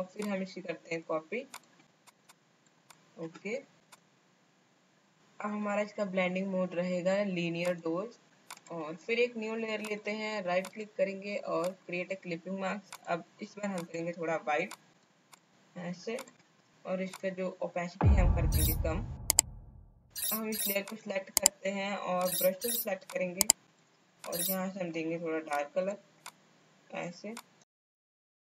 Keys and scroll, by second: 28.1 space.